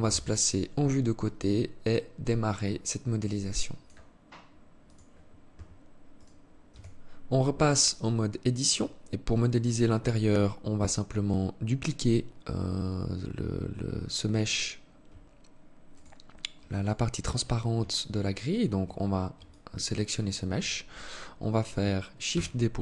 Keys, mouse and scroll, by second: 0.5 alt+shift+click, 5.7 right click, 6.3 Tab, 7.4 alt+click, 15.5 right click, 16.3 alt+right click, 17.9 shift+right click, 19.0 alt+click, 21.9 shift+d.